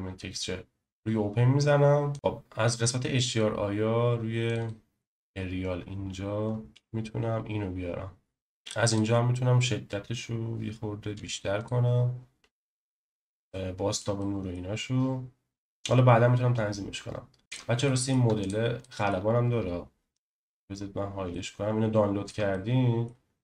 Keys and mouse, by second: 2.1 click, 9.0-11.6 drag, 13.5-14.0 shift+middle drag, 14.2 middle click, 17.8 shift+middle click, 18.4 click, 18.8 middle click, 20.4 h, 21.3-22.3 shift+middle drag, 22.5 middle click.